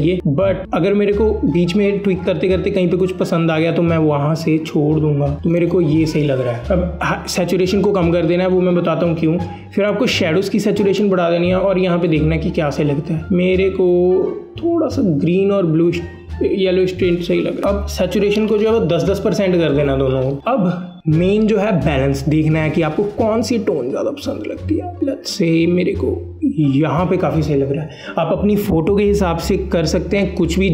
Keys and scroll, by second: 17.9 KP_1, 18.0 KP_0, 19.9 KP_0.